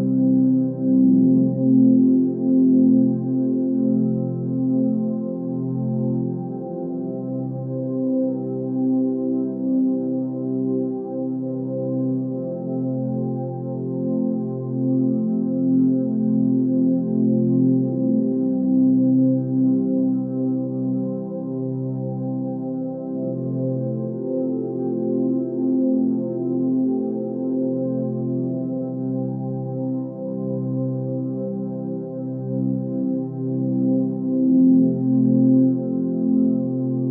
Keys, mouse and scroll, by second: 24.6 Delete, 25.9 Delete.